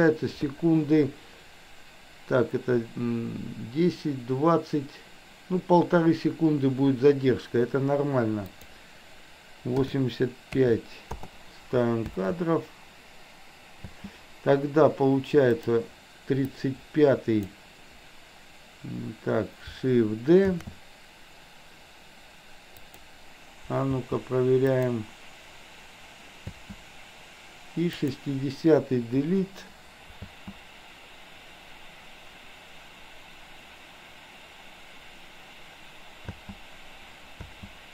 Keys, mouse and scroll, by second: 8.7-11.3 drag, 12.1 space, 13.9 space, 15.6 click, 16.4-17.4 drag, 20.6 shift+d, 23.9 space, 24.8 click, 26.4 space, 27.9 click, 29.3 Delete, 30.2 space, 36.3 space, 37.6 space.